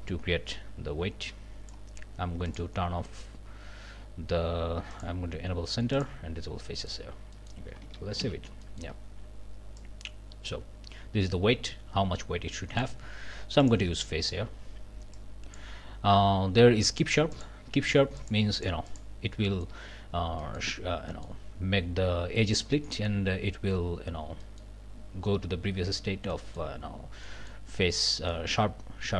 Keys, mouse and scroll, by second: 2.5 click, 4.9 click, 5.9 click, 6.7 middle click, 7.1 scroll up 1, 7.3 middle click, 8.2 ctrl+s, 8.6 ctrl+middle click, 9.8-13.0 middle drag, 13.6 middle click, 14.2 click, 15.1 click, 17.3 click, 17.8 click, 18.6 click, 19.3 middle click, 20.4 middle click, 21.1 middle click, 22.6 middle click, 22.9 scroll up 1, 24.4 middle click, 26.3 middle click, 27.2 middle click, 28.3 click.